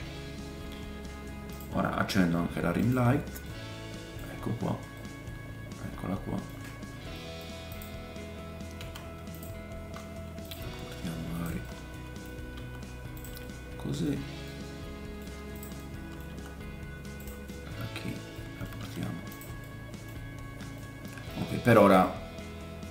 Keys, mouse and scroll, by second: 1.5 middle click, 1.5 right click, 2.8 middle click, 2.8 right click, 3.4 middle click, 4.3-5.0 scroll down 2, 6.4-8.0 middle drag, 6.7 scroll down 1, 7.7 click, 7.7 right click, 7.9-10.6 typing, 8.0 click, 8.7-11.6 right drag, 11.6-14.1 drag, 11.6 middle click, 11.6 scroll up 1, 12.6 g, 13.4 middle click, 14.1 right click, 14.1-14.4 scroll down 2, 14.4 click, 14.4 middle click, 14.6-18.6 right drag, 15.5 click, 15.8 middle click, 16.3 g, 18.6-22.9 middle drag, 18.8 g, 21.9 shift+scroll up 1.